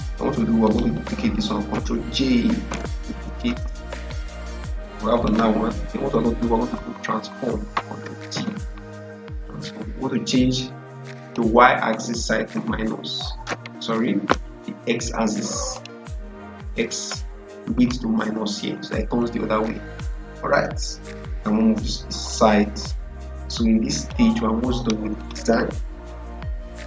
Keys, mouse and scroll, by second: 2.6 ctrl+j, 4.0-7.7 drag, 7.9 click, 8.2 ctrl+t, 11.1 ctrl+t, 11.1 click, 13.8 ctrl+z, 15.6 click, 19.8-25.1 drag.